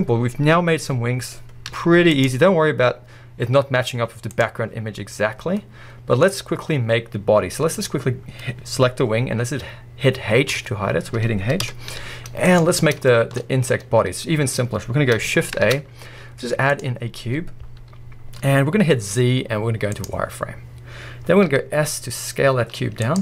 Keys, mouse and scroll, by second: 0.2-1.2 scroll up 1, 1.2-2.2 scroll up 1, 2.2 z, 4.4 click, 4.8-5.5 scroll up 1, 5.5-6.5 middle drag, 6.4 scroll down 1, 7.3 scroll up 1, 7.9 click, 10.5 h, 11.6 KP_1, 12.6 z, 12.8 scroll up 1, 13.1 shift+middle click, 13.4-14.1 scroll up 1, 14.1-14.6 scroll down 1, 14.6-16.2 scroll up 1, 16.2-16.8 scroll up 1, 17.8-23.2 right drag, 17.8 scroll, 20.1 z, 20.8 scroll, 21.5 s.